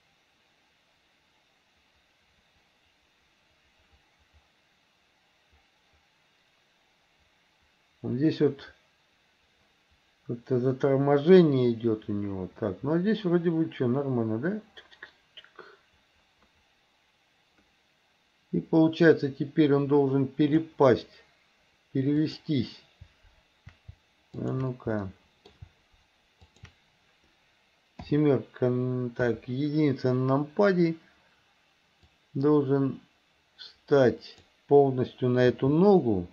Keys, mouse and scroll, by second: 22.3 click, 24.5 shift+click, 25.0 middle click, 25.4 middle click, 26.5 shift+click, 28.1 KP_7, 29.3 KP_1, 32.1 click, 32.3-34.5 drag, 35.6 g.